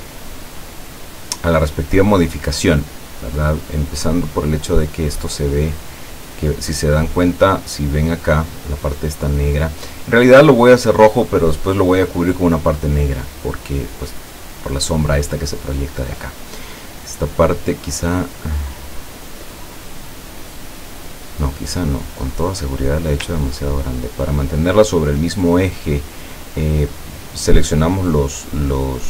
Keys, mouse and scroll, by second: 0.7 click, 3.1-4.5 drag, 22.0 click, 23.4-25.4 ctrl+drag.